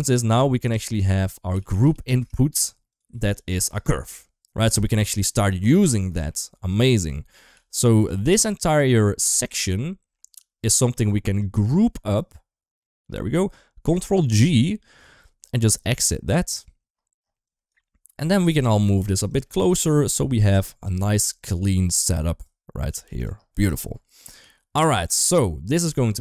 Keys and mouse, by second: 4.8 click, 6.5 drag, 7.0 middle click, 7.3 g, 8.2 middle click, 9.0 g, 10.2 click, 12.0 click, 14.3 ctrl+g, 15.4 click, 15.6 right click, 17.3 click, 17.6 middle click, 18.1 g, 18.5 middle click, 18.9 g, 19.4 middle click, 19.7 g, 20.4 Escape, 21.2 g, 22.7 g, 24.2 g, 25.7-26.2 drag.